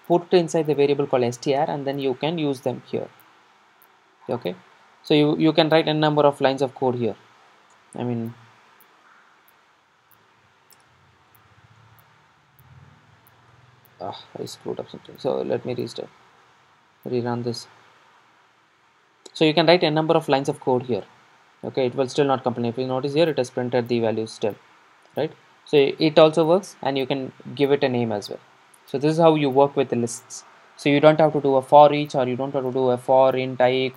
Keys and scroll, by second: 4.0 super+r, 6.7 super+d, 8.2 super+z, 10.0 super+d, 12.9 ctrl+shift+super+Down, 13.6 ctrl+shift+super+Up, 15.6 super+r.